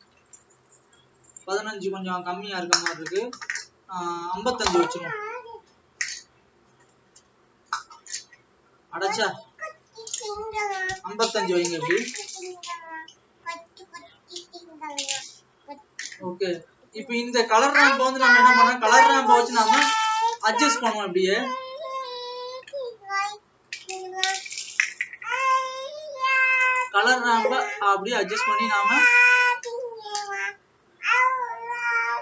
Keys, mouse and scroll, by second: 28.9 click.